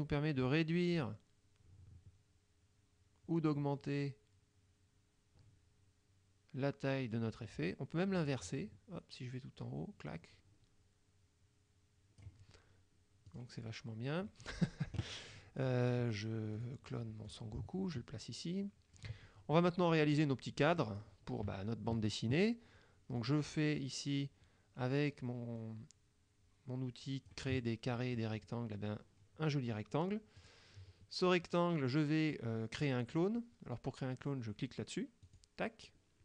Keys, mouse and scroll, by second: 13.4 click, 14.4-14.9 middle drag, 15.6 click, 16.6 click, 17.4-19.2 drag, 20.9 click, 23.3-27.6 drag, 30.5 click, 35.4 click.